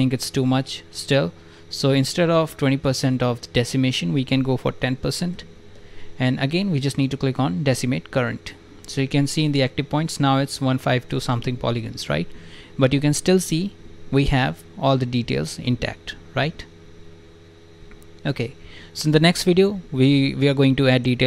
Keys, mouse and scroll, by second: 5.3 0, 6.5 click, 11.7 click, 13.0 click, 13.7 shift+f, 14.7 click, 16.5 alt+right click, 16.9 right click, 17.9 alt+right click, 18.4 right click, 18.5 click, 18.8 alt+right click, 19.3 click, 19.8 alt+click.